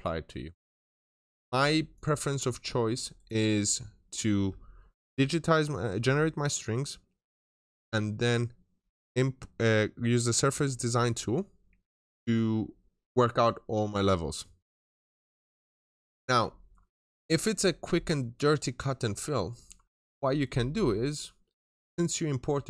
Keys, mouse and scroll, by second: 0.4 middle click, 0.8 right click, 1.1 double click, 1.8 click, 2.4 scroll down 1, 2.6 middle click, 3.0 right click, 15.8 click, 19.0 scroll down 1, 19.2 middle click, 21.3 scroll up 1.